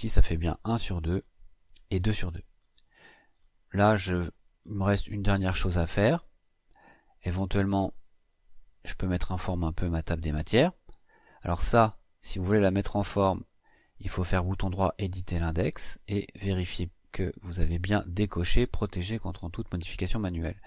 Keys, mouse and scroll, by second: 2.3-4.0 scroll up 10, 4.0 middle click, 4.4 middle click, 4.8-6.0 scroll up 8, 7.4 click, 8.5 Delete, 10.9 click, 14.6 click.